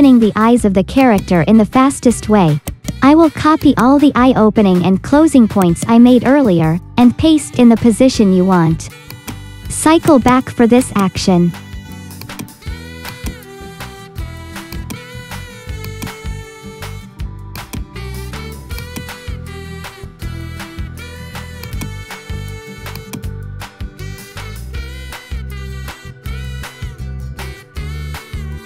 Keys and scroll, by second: 5.0 ctrl+c, 6.9 ctrl+v, 19.6-21.0 typing, 23.2 space.